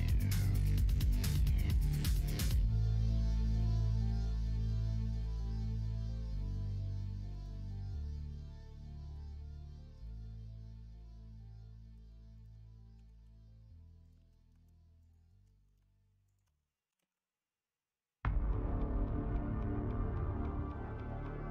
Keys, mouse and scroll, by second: 1.1-2.4 middle drag, 5.1 s, 7.7 middle click, 8.1-9.1 right drag, 9.1 middle click, 10.0 middle click, 10.1-11.9 right drag, 11.9 middle click, 12.9 s, 14.2 ctrl+z, 15.0 alt+shift+click, 15.4 middle click, 16.3 alt+shift+click, 16.9 s, 20.9 ctrl+z.